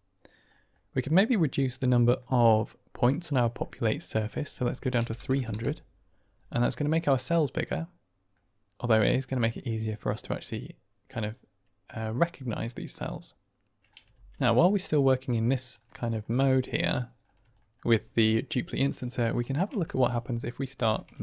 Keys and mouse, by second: 0.5 click, 1.6-2.1 drag, 3.6 middle click, 4.2-6.0 drag, 5.2 KP_0, 6.6-7.1 middle drag, 7.3-8.2 middle drag, 9.0 middle click, 9.5 shift+middle click, 10.0-10.9 middle drag, 12.7-13.8 middle drag, 14.0 ctrl+space, 14.8-15.7 drag, 16.7 click, 17.5 shift+drag, 19.6 Tab, 20.1 click, 20.7 g, 21.1 shift+z.